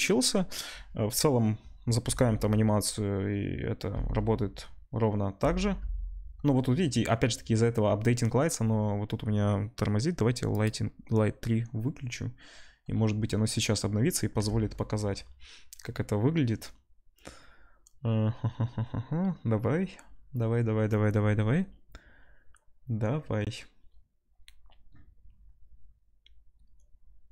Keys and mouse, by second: 2.2 space, 10.5 click.